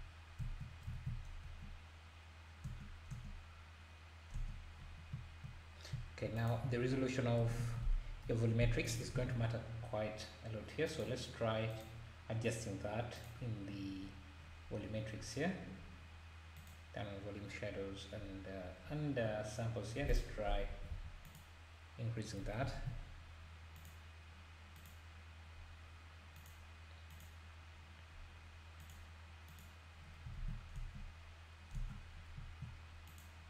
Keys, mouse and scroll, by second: 1.0 ctrl+s, 1.4 space, 2.6 space, 5.6-5.9 scroll down 1, 6.4 click, 7.4 s, 9.2 alt+a, 9.7 scroll down 1, 10.9 click, 11.7 click, 13.2 click, 13.6-14.0 scroll down 2, 14.0-14.4 scroll up 1, 15.1 scroll up 1, 15.6 scroll down 1, 16.7 click, 17.6-18.1 scroll down 1, 18.2-18.6 scroll up 2, 19.2-20.1 scroll down 1, 20.1-21.4 drag, 22.8 ctrl+s, 23.0-23.7 scroll up 4, 23.7-30.4 drag, 30.4 ctrl+s, 30.7 space, 31.8 space, 32.1 scroll down 1, 33.1 click.